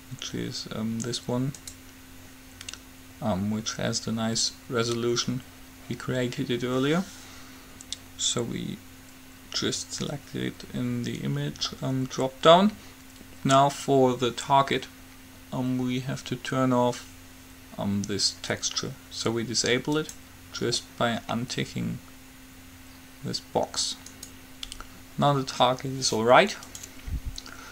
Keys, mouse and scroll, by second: 11.8-20.2 middle drag, 20.2-22.0 drag, 24.4-25.9 right drag, 27.0-27.7 drag.